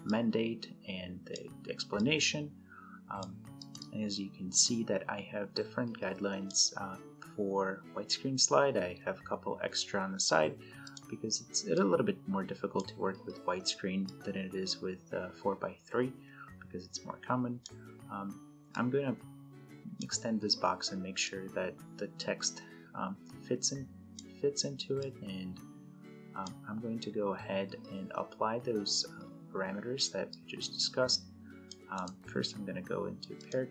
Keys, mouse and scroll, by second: 0.3-1.4 drag, 10.5-12.8 drag, 30.0-31.7 drag, 31.7 right click, 33.1 click.